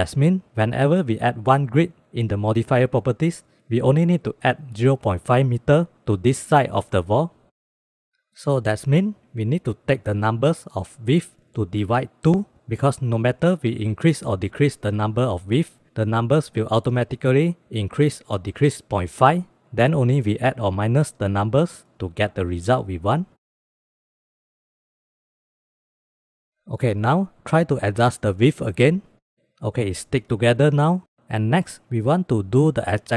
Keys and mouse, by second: 1.2 click, 3.5 click, 8.8 shift+d, 9.9-10.7 drag, 11.4 click, 17.1 click, 18.5 click, 20.4 click, 22.1 shift+b, 23.1 click, 25.8 middle drag, 26.3 middle click, 27.3 click, 27.8 click, 29.5 click, 29.7 click, 30.0 click, 30.8 click.